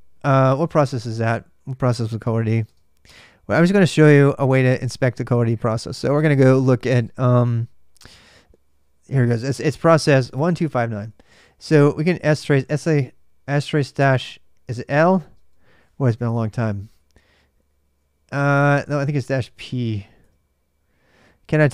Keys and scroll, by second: 0.0 ctrl+[, 2.0-15.1 typing, 17.0 Return, 18.0-20.1 typing.